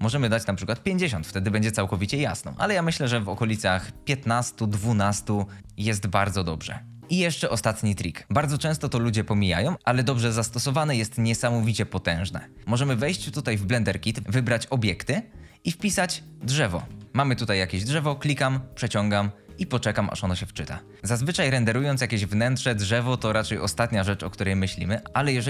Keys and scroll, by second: 0.1-0.8 typing, 3.0-4.0 typing, 5.3-6.1 typing, 16.5 typing, 21.0 g, 25.0 g.